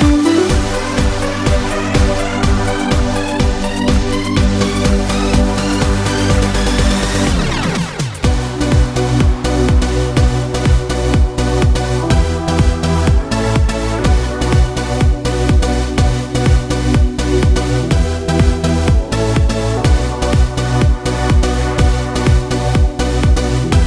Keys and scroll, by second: 3.3 ctrl+v, 13.9 ctrl+c, 14.5 ctrl+v.